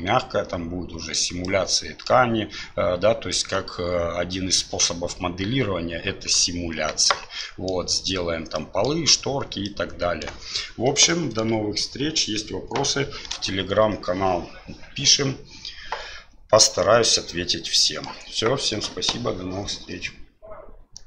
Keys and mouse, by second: 1.5-2.1 middle drag, 7.5 middle drag, 8.7 middle click, 9.7-10.4 middle drag, 11.1-11.5 shift+middle drag, 16.7-18.1 middle drag.